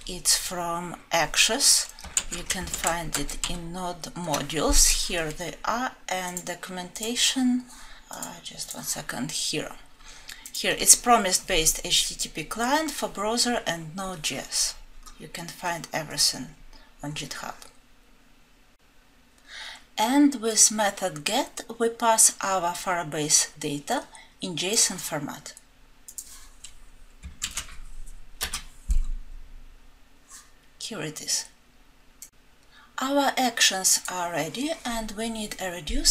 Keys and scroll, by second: 4.1 alt+Home.